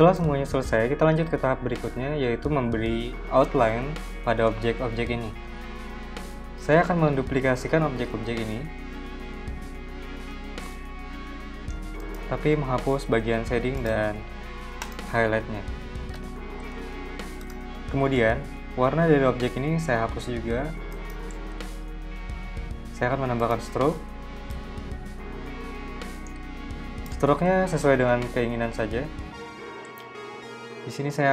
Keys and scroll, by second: 0.2 v, 5.5 z, 8.3 super+c, 9.4 super+v, 15.3 BackSpace.